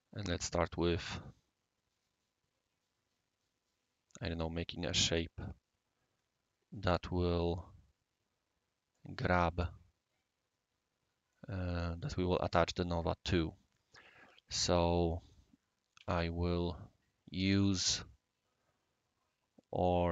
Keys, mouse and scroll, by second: 0.0 scroll down 1, 0.0 scroll up 1, 0.1 scroll down 1, 0.1-1.1 scroll up 2, 1.1-2.2 right drag, 11.8-15.2 right drag, 16.0 typing, 16.4 scroll up 1, 16.4 scroll down 1, 16.5 scroll up 1, 16.8 scroll down 1, 16.8-17.7 scroll up 1, 17.7-20.1 scroll up 1.